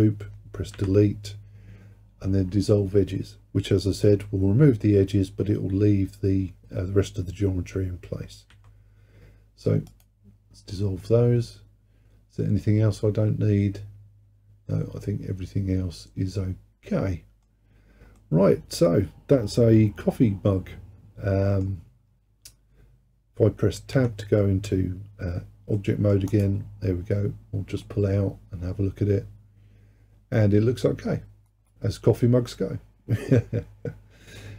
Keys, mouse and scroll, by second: 0.8 Delete, 11.1-14.2 middle drag, 17.7-18.2 scroll down 1, 18.2-21.3 middle drag, 24.0 Tab, 25.8-26.3 middle drag, 26.3 click, 26.7-27.3 scroll down 2, 27.3-27.9 scroll up 1, 27.9-30.9 middle drag.